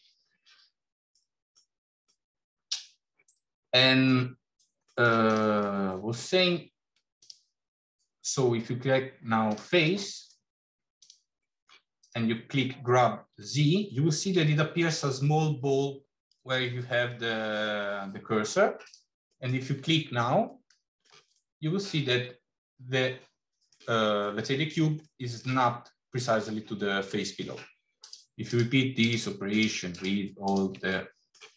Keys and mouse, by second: 1.1 middle click, 1.9-2.9 middle drag, 3.2 click, 3.6 middle click, 4.7 middle click, 5.1 click, 5.4 middle click, 7.0-10.6 drag, 10.8 click, 11.3 middle drag, 11.8 click, 13.2 g, 19.2 middle click, 20.4 middle click, 21.2-23.6 middle drag, 25.0 middle click, 27.8 click, 28.3 shift+click, 28.8 shift+click, 29.3 shift+click, 29.8 shift+click, 30.3 shift+click, 30.7 middle click.